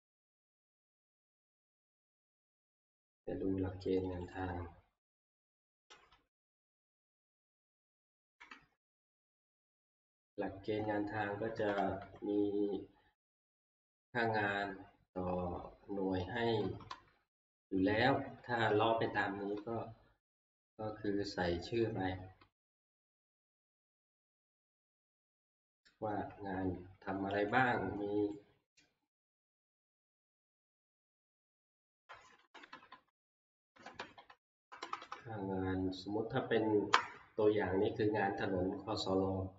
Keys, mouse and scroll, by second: 1.9 click, 4.1 click, 4.2 scroll up 2, 4.3 click, 5.3-5.9 scroll, 7.7 click, 8.3 Right, 8.5 Right, 8.9-10.5 Right, 9.3 scroll, 11.4 Right, 11.6 Right, 11.7 Right, 12.0 Right, 16.5 click, 16.6 Left, 16.9 Left, 17.3 Left, 17.8 Left, 18.1 Left, 18.4 Left, 19.6 Left, 21.8 Left, 22.1 Left, 22.4 Left, 22.7 Left, 25.0 click, 27.5 click, 28.3 click, 30.5 click, 31.3 ctrl+scroll, 32.4 Right, 32.5 Right, 32.7 Right, 32.9 Right, 33.1 Right, 33.7 Right, 33.8 Right, 34.0 Right, 34.6 Left, 34.8 Left, 34.8 ctrl+scroll, 35.0 Left, 35.2-36.9 Left.